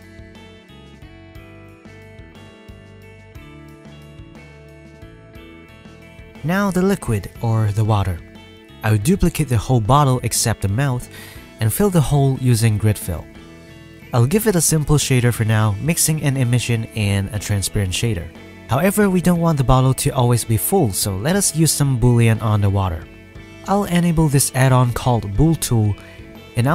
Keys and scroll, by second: 8.7 shift+d, 9.2 p, 9.8 Tab, 10.2 Tab, 10.2 a, 11.9 Tab, 12.2 Tab, 12.4 e, 13.4 ctrl+e, 13.5 ctrl+f, 14.3 Tab, 20.4 KP_1, 20.6 ctrl+s, 25.4 shift+a, 25.8 s, 26.0 ctrl+a.